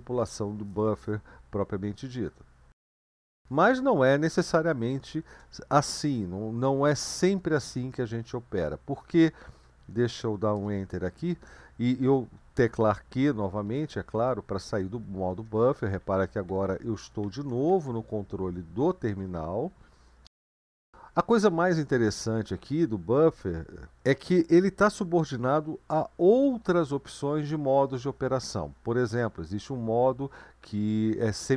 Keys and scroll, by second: 4.5 BackSpace, 5.1 BackSpace, 5.2 BackSpace, 10.6 Return, 13.7 q, 15.3 Up, 15.5 Up, 15.7 Down, 15.8 Down, 16.0 Down, 16.2 Up, 16.5 Down, 16.7 Down, 17.0 Up, 17.2 Down, 17.5 Up, 17.7 Down, 17.9 Down, 19.7 ctrl+l.